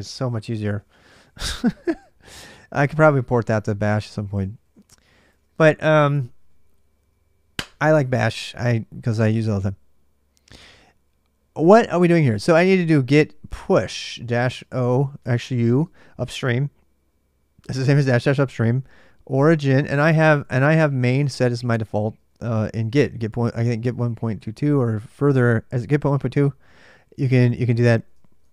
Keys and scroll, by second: 0.1-5.5 typing, 2.8 ctrl+[, 12.1-15.4 typing, 18.4-21.9 typing, 27.3-28.5 typing.